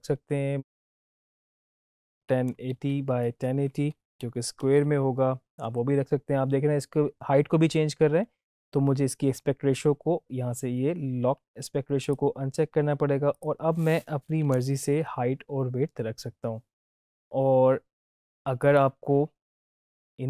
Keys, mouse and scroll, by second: 11.9 click, 16.8 Tab, 18.6-20.2 drag.